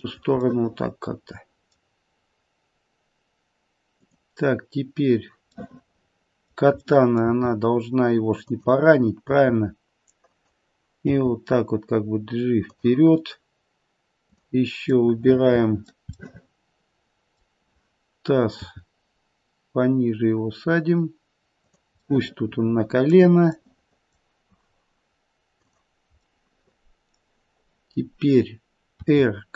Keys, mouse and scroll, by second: 0.5 middle click, 3.9 click, 5.5 middle click, 6.8 middle click, 7.2 g, 9.2 r, 11.0 g, 15.5 click, 15.5 middle click, 15.6 middle click, 16.1 middle click, 18.5 g, 22.0 middle click, 23.5 middle click, 25.6 click, 26.3 middle click, 29.0 r.